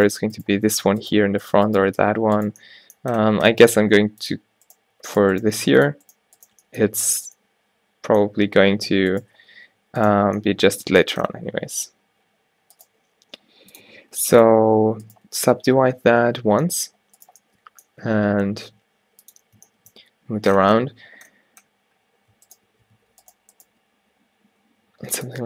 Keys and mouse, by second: 2.1 f, 3.7 g, 5.0 g, 5.6 g, 6.6 g, 9.5 a, 9.7 a, 12.9 g, 13.8 click, 14.0 a, 14.1 a, 16.5 alt+w, 18.1 g, 23.0 alt+w, 23.8 g.